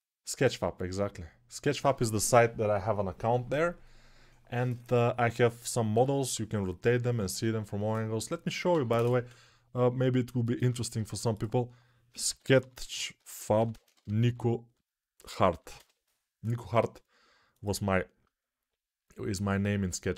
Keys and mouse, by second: 20.1 click.